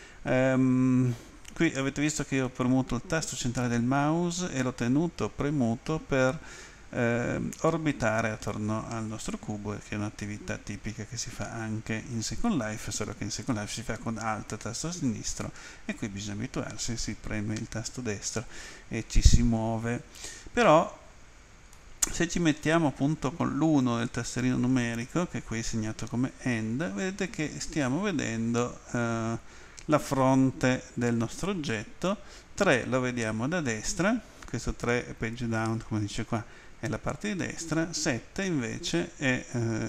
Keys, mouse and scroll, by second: 2.2 middle click, 21.7 middle click, 23.6 End, 32.4 Page_Down, 38.0 Home.